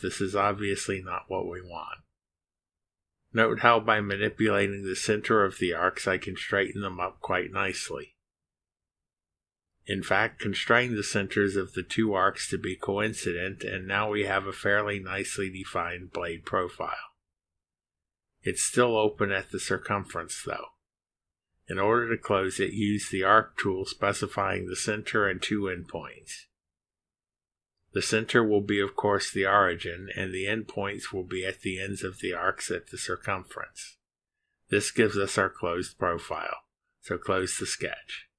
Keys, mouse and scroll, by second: 4.5-5.2 drag, 6.5-10.0 drag, 12.8 click, 14.8 click, 17.4 click, 24.4 click, 25.3 click, 29.1 scroll up 2, 31.4 click, 32.6 scroll down 2, 33.5 scroll down 2, 36.3 click, 37.0 click.